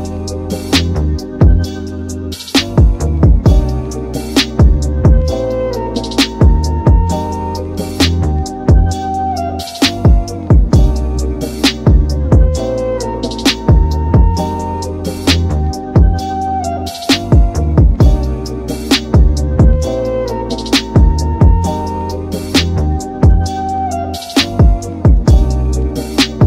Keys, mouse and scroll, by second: 1.2 Tab, 1.5-2.2 middle drag, 2.2-3.1 right drag, 3.1-5.2 middle drag, 5.2-6.3 scroll down 2, 6.3 click, 6.8-7.4 scroll down 1, 7.4 KP_Divide, 8.0 middle click, 8.7 KP_Decimal, 9.2-10.5 scroll down 8, 10.0 middle click, 10.5 middle click, 10.8 g, 11.9-13.1 middle drag, 13.1 Tab, 13.8 Tab, 14.2-17.9 middle drag, 17.9-19.2 scroll down 3, 19.2-20.0 shift+middle drag, 20.0-20.9 scroll down 2, 20.9 shift+middle click, 21.8-22.3 scroll up 1, 22.3-26.4 middle drag.